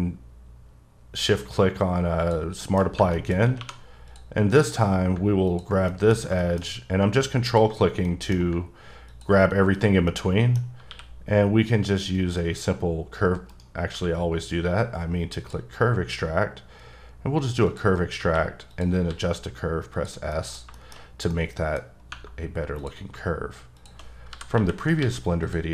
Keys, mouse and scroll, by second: 2.2 shift+click, 2.6 shift+middle click, 3.0 Tab, 3.1 middle click, 3.5 scroll up 1, 3.5 2, 4.1 click, 4.6 click, 5.9 middle click, 7.5 ctrl+click, 8.1 middle click, 9.1 ctrl+click, 10.1 middle click, 10.5 scroll down 1, 10.9 q, 12.1 click, 13.5 right click, 13.9 q, 15.4 click, 17.6 click, 18.2 q, 18.7 click, 19.1 s, 19.9 click, 20.3 middle click, 21.9 scroll up 1, 22.8 click, 23.8 shift+click, 24.3-25.7 typing, 25.4 click.